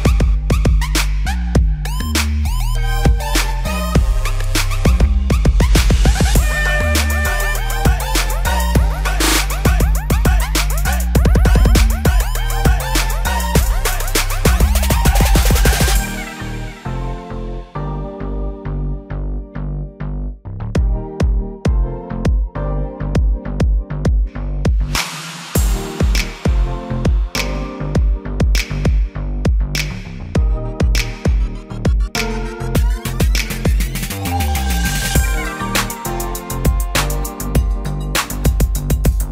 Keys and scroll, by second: 4.5 v.